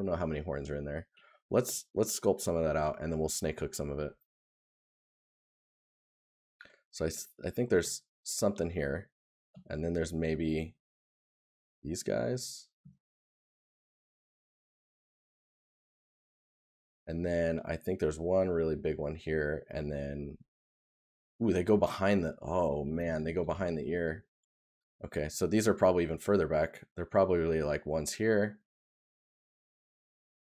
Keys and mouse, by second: 5.2 right click, 12.4 right click, 16.5 right click, 19.0 right click, 21.5 right click.